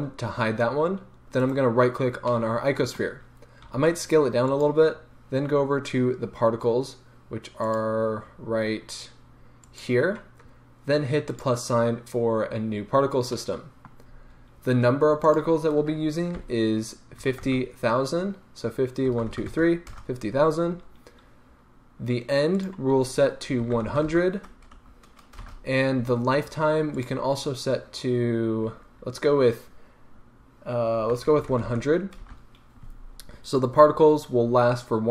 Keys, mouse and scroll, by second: 1.4-2.3 right drag, 2.7-3.6 middle drag, 3.6 s, 4.6 click, 7.6 click, 9.6 click, 11.3-13.4 drag, 12.8-13.4 scroll up 2, 13.4-15.2 middle drag, 14.1-15.2 scroll up 2, 15.2-35.1 drag, 19.2 KP_0, 20.0 Return, 24.0 KP_0, 25.5 Return, 31.6 KP_0, 32.3 Return.